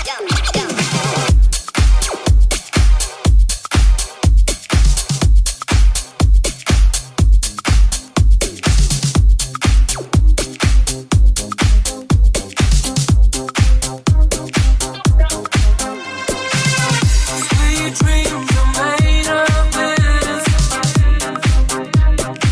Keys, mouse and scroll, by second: 12.8 right click, 21.4-22.5 shift+drag, 21.9 ctrl+Tab.